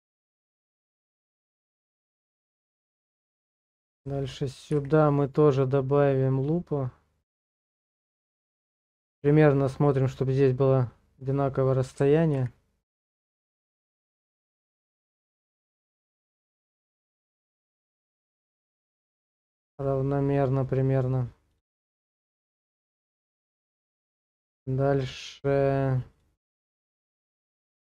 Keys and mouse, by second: 0.9 shift+middle click, 1.3 Tab, 2.0 middle click, 2.5 shift+middle click, 4.7 ctrl+r, 22.1 click, 22.7 middle click, 23.5 middle click, 24.1 shift+middle click, 25.1 click, 27.2 ctrl+r.